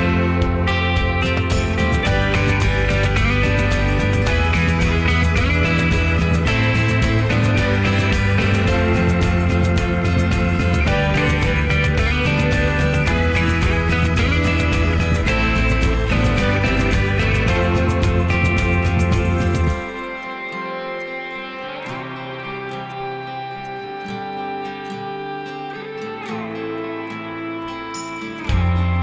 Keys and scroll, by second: 26.1 2, 26.2 Return, 28.7 typing.